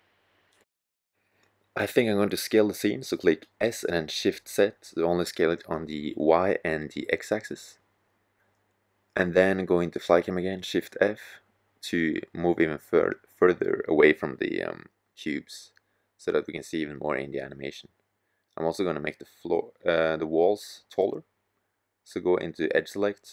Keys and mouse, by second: 1.5 s, 7.4-9.0 drag, 9.0 shift+f, 16.4 click, 17.4-18.5 drag, 18.9-20.0 drag, 21.7 click.